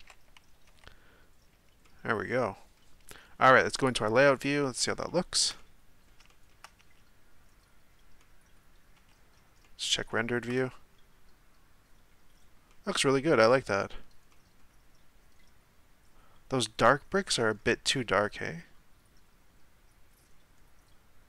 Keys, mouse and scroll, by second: 0.8 z, 1.8-3.8 middle drag, 3.8 click, 4.8-5.1 scroll down 2, 5.1-7.0 shift+middle drag, 7.0 z, 8.2-9.1 middle drag, 9.1 z, 9.6-17.3 middle drag, 17.6-18.1 scroll up 1, 18.1-19.7 scroll up 1, 19.7-20.6 scroll up 1.